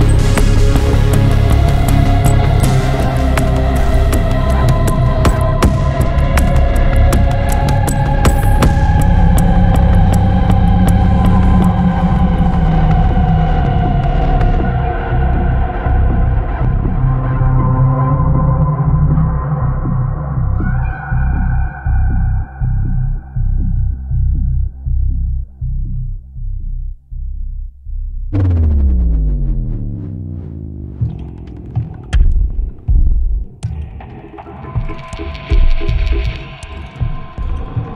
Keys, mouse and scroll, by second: 0.3 click, 1.6 click, 3.5-6.0 drag, 7.1 click, 8.2 click, 9.5 click, 11.0 click, 12.5 click, 15.1 click, 16.0-16.3 scroll up 2, 16.7 scroll down 2, 17.4 scroll up 2, 19.3 click, 20.6 click, 21.7 m, 25.3 click, 27.0 click, 27.8 m, 31.2 click, 35.1 click, 36.8 click, 37.7 m.